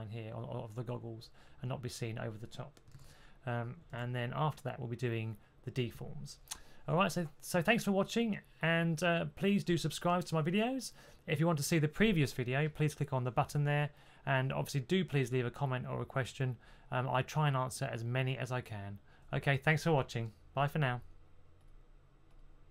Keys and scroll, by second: 2.8 super+z, 3.8 super+z.